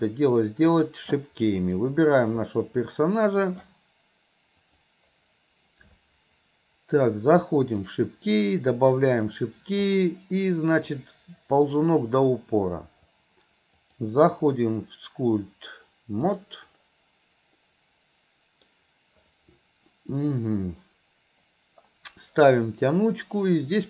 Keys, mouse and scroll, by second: 1.6 click, 4.7 click, 7.8 click, 9.0 click, 9.9 click, 11.0 click, 13.9-16.6 drag, 17.7-18.8 middle drag.